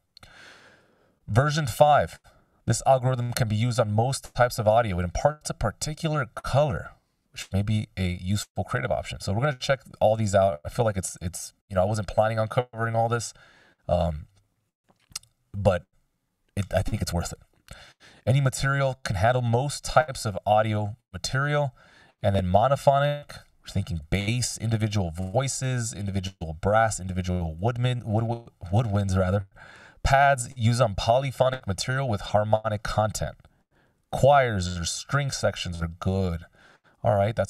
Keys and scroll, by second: 11.1 super+s.